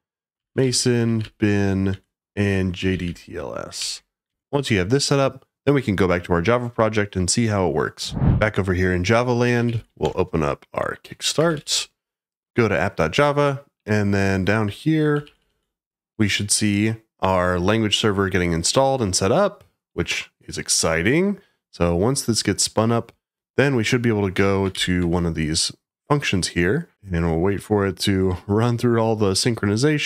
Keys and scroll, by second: 9.2-10.2 typing, 11.2-12.9 typing, 14.6-15.0 j, 15.2 j, 15.3 j, 15.5 j, 16.9-17.6 typing, 24.3 f, 24.7 shift+g.